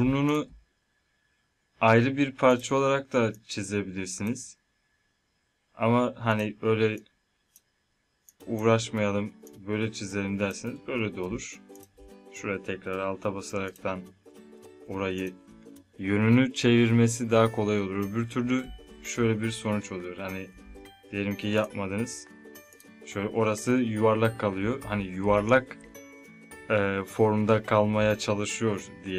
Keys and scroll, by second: 18.4 ctrl+Num_Lock, 18.7 z.